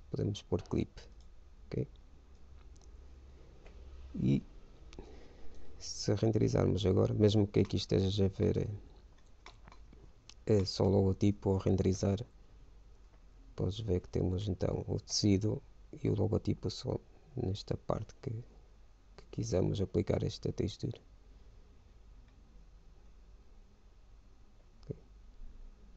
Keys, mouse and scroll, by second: 3.0-4.6 drag, 8.0-11.8 middle drag, 11.8 shift+z, 12.6 middle click.